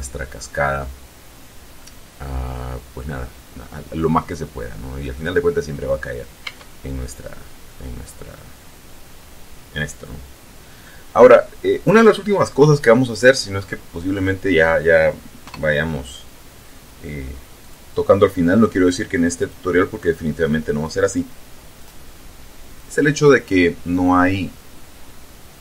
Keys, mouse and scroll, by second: 2.0-5.5 middle drag, 6.6 Tab, 11.0 click, 15.6 KP_0, 17.8 click, 19.5 click, 21.9 click, 22.8 click.